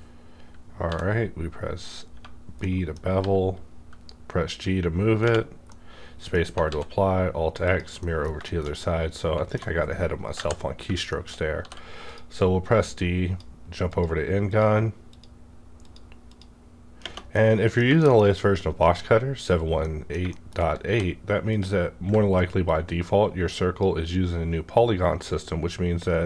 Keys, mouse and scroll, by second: 0.9 b, 2.1 Tab, 2.6-5.2 middle drag, 3.2 g, 5.2 space, 5.7-7.7 middle drag, 6.6 alt+x, 7.7 click, 8.0 middle click, 8.4 shift+middle click, 8.8-11.0 shift+middle drag, 10.4 KP_5, 11.1 shift+middle click, 11.1 KP_5, 11.3-12.0 shift+scroll up 2, 11.6 d, 12.0 click, 12.6-14.5 drag, 17.0 space, 17.3-19.8 middle drag, 20.3 shift+middle click, 20.6 shift+scroll up 1, 20.8 d, 21.5 click, 22.7-26.1 ctrl+drag.